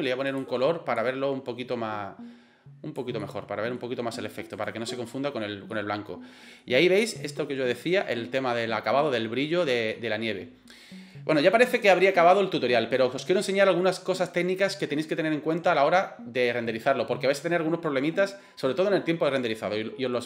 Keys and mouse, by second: 0.3 click, 3.2-3.8 middle drag, 4.6 right click, 4.9 middle drag, 5.7-6.6 middle drag, 9.1 middle click, 9.9 middle click, 11.3 middle click.